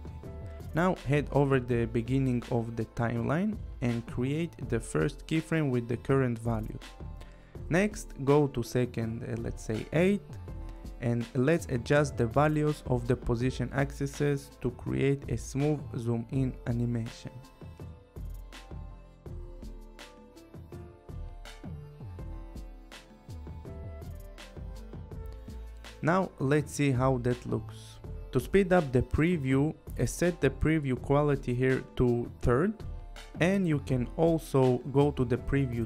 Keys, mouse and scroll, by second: 1.0 click, 3.6 click, 5.1 click, 10.3 click, 15.0 click, 18.6 click, 22.4 click, 24.8 click, 26.4 click, 29.8 click, 32.3 click.